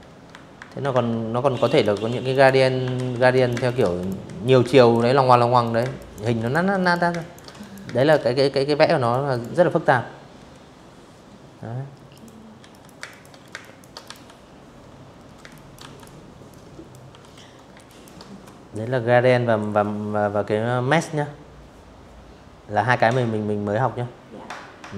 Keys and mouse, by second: 0.0 click, 0.1 z, 0.6 ctrl+z, 1.0 click, 1.2-5.8 typing, 1.3 click, 1.6 click, 2.4 click, 3.3 click, 3.6 click, 4.1 click, 4.4 click, 4.8 click, 5.2 click, 5.6 click, 6.6 click, 7.0 click, 9.8 click, 10.3 z, 10.4 click, 10.6 space, 10.7 click, 11.2 space, 11.2 click, 11.7 click, 11.7 v, 13.0 space, 13.2 click, 13.4 v, 13.6 click, 14.2 click, 14.8 Delete, 15.2 space, 15.5 click.